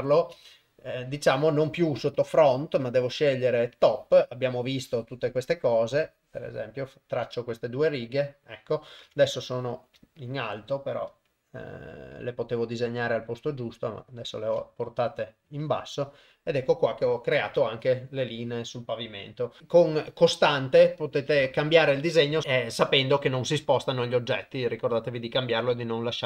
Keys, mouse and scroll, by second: 0.4 shift+middle click, 2.1-3.9 drag, 4.7 click, 6.2 click, 7.4-8.8 middle drag, 9.0 Tab, 11.0 middle click, 14.2-15.3 middle drag, 15.4 KP_0, 19.6 g, 19.6 shift+space, 22.4 Tab.